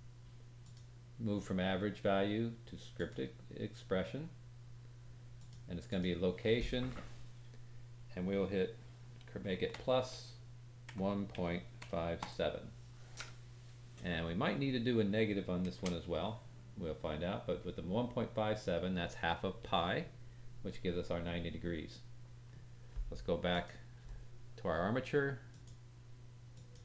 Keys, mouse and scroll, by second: 23.5 click, 25.5-26.8 drag.